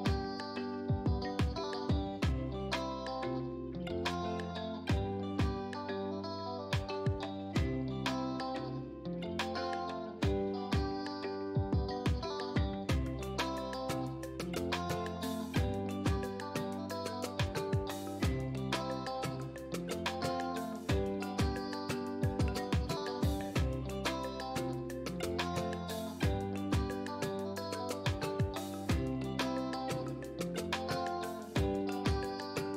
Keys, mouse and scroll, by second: 0.7 right click, 2.2 click, 3.4-3.8 scroll down 1, 4.3-7.4 drag, 7.4 ctrl+t, 8.5-9.9 drag, 9.9 scroll up 1, 10.6-16.4 drag, 17.0-17.5 scroll down 1, 17.5 space, 17.6 click, 18.0 space, 18.4-19.0 scroll down 1, 19.5 ctrl+t, 20.5 click, 21.8 Return, 22.8 ctrl+a, 24.3 click, 25.4 ctrl+d.